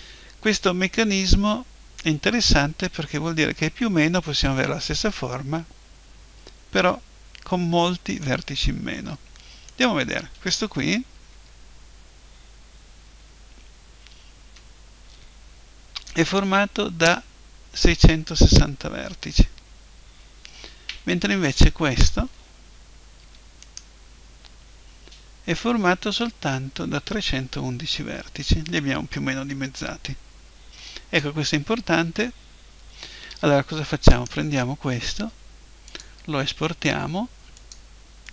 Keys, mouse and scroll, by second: 0.0 Escape, 1.1-2.9 drag, 3.4 middle click, 8.2-9.7 middle drag, 9.7-11.3 right drag, 11.3 Tab, 21.4-23.5 right drag, 23.2 Tab, 23.6-25.5 right drag, 24.0 Tab, 33.3 Tab, 34.1-35.9 right drag, 35.9-37.8 drag.